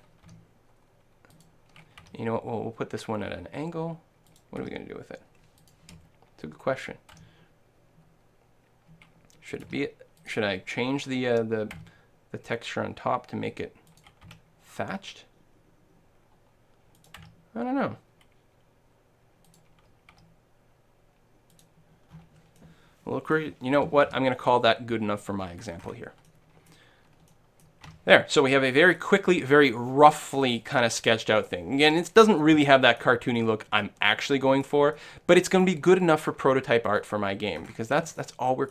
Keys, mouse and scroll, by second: 0.0-3.4 drag, 0.3 g, 2.0 r, 4.4 click, 4.6 r, 7.2 g, 9.6-11.5 drag, 9.8 r, 11.8 s, 14.0-15.9 drag, 14.5 r, 17.1-19.0 drag, 17.2 s, 19.6-21.3 drag, 20.5 r, 21.6-23.5 drag, 22.1 middle click, 22.6-35.5 middle drag, 24.3 a, 27.9 Tab, 36.9 right click, 37.6 click, 37.8 shift+middle click, 38.2 shift+right click, 38.4 shift+click.